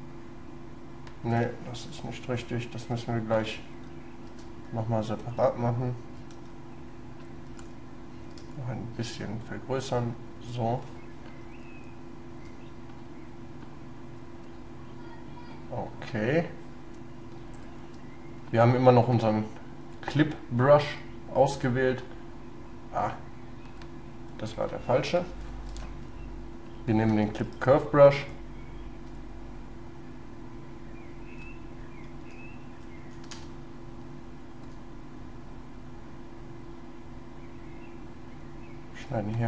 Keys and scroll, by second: 1.9 ctrl+z, 3.4 ctrl+y, 5.2 ctrl+y, 6.3 ctrl+y, 25.0 ctrl+z, 25.8 ctrl+y, 27.1 space, 29.0 shift+space.